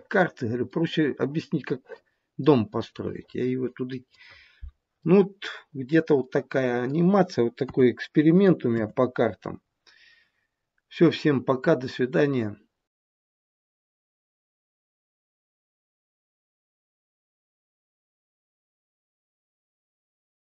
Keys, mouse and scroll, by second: 0.4 scroll up 1, 0.5 middle click, 2.8 middle click, 5.0 middle click, 5.3 middle click, 6.2 middle click, 7.5 KP_1, 8.7 KP_7.